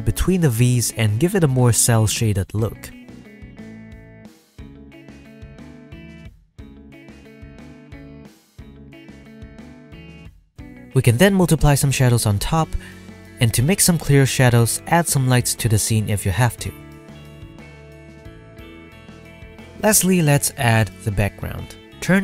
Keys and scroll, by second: 20.6 z, 21.1 z.